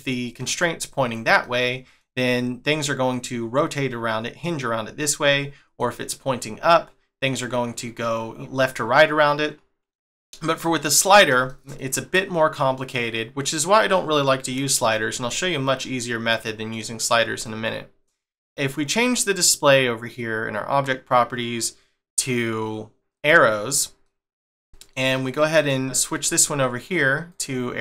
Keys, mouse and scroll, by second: 1.4 middle click, 5.2 middle click, 8.7 middle click, 15.2 shift+middle click, 17.4 shift+middle click, 19.0 click, 24.0 middle click, 25.6 click, 25.8 shift+middle click, 27.3 click.